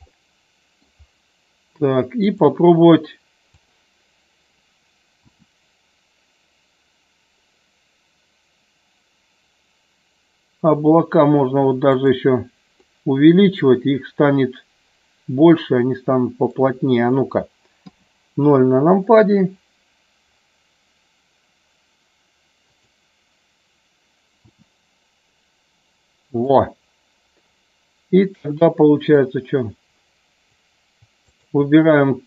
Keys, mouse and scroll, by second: 0.1 middle click, 5.4 s, 12.0 click, 13.0-16.6 middle drag, 17.9 KP_0, 26.5 click, 29.1-30.6 drag, 31.2 shift+click.